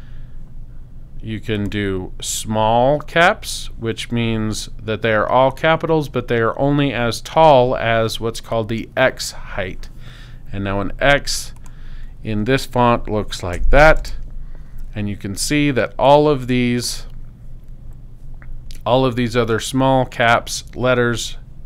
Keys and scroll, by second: 13.5 x, 14.0 space.